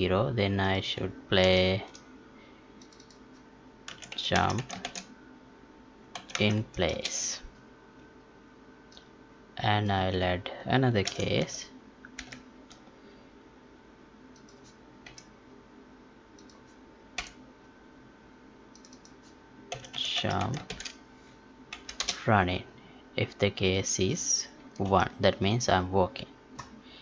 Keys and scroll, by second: 1.4 ctrl+v, 11.0 ctrl+c.